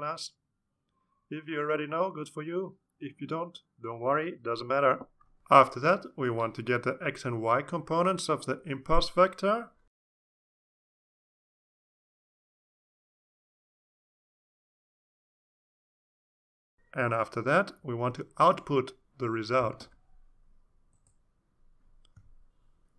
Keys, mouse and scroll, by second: 5.8-15.0 typing, 14.4 Return, 15.4 Return, 16.7-22.9 typing, 22.8 Return.